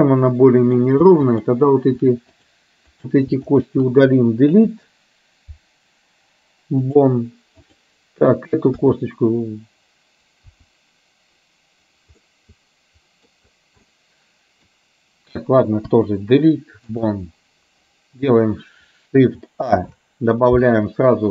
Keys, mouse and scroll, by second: 1.3 shift+click, 2.4 click, 3.7 shift+click, 5.4 Delete, 8.8 KP_3, 11.4 KP_1, 12.3-13.4 middle drag, 13.9 middle click, 16.2 Delete, 19.9 shift+a.